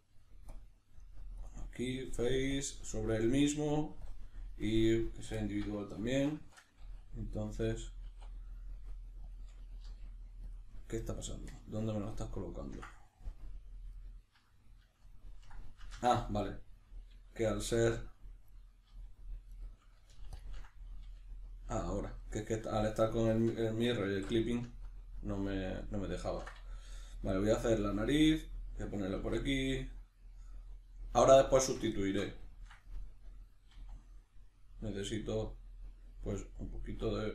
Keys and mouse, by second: 0.6-5.4 drag, 5.4-9.3 shift+middle drag, 6.3 shift+Tab, 8.1 e, 9.3 click, 9.8 g, 10.5 click, 10.7-18.5 middle drag, 13.3 KP_Decimal, 16.0 ctrl+z, 18.5 right click, 18.9 g, 19.6 right click, 20.4 ctrl+click, 21.0 g, 22.0 click, 22.2-28.4 middle drag, 24.1 alt+q, 27.1 g, 28.4 click, 29.2 e, 31.6 click, 32.0-36.6 shift+middle drag, 33.8 e, 36.6 click, 36.8 e.